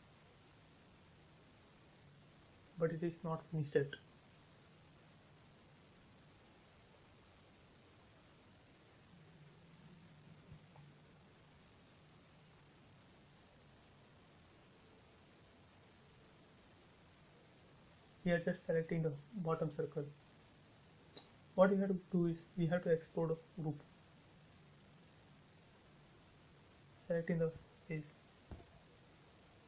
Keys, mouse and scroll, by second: 0.0 scroll down 1, 1.4 click, 1.8 middle click, 2.6-2.9 scroll down 1, 3.1 shift+middle click, 4.0 scroll up 1, 7.9 scroll down 1, 9.0 shift+middle click, 9.1 shift+middle click, 9.5-9.9 scroll up 1, 9.9 middle click, 11.4 click, 13.6 shift+click, 14.5 Delete, 15.0-15.8 scroll up 1, 15.8 click, 16.2 scroll down 1, 18.2 click, 18.9 scroll up 1, 20.5 shift+e, 21.0 click, 21.3 right click, 22.4 click, 22.8 click, 23.2-23.9 scroll down 1, 23.9 shift+middle click, 25.0 click, 29.1 space, 29.4-29.6 scroll down 1.